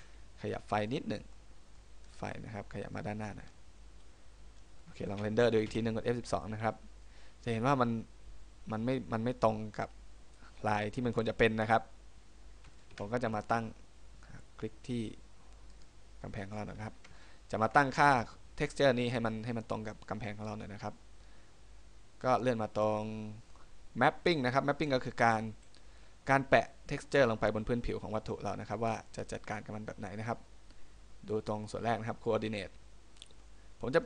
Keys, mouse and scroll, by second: 0.1 Escape, 0.7 middle click, 1.2-2.2 scroll down 3, 1.4 middle click, 2.2 right click, 2.5 middle click, 3.6 click, 4.9 middle click, 13.1 Escape, 15.9 right click, 17.0 shift+middle click, 17.9-18.8 scroll up 3, 19.6 middle click, 22.6 middle click.